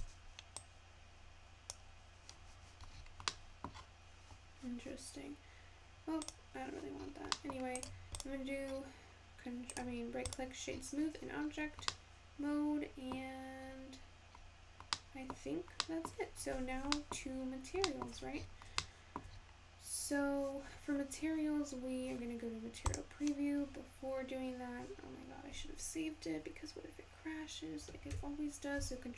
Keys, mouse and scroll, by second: 0.6-3.5 drag, 3.5-5.6 middle drag, 5.6 scroll up 5, 7.0 click, 7.3-7.9 scroll up 4, 7.9 right click, 11.2-14.6 scroll up 7, 14.6-16.0 scroll down 3, 16.0-16.6 scroll down 1, 16.6-17.1 scroll down 2, 17.1-22.6 shift+middle drag, 22.6-26.1 scroll down 2.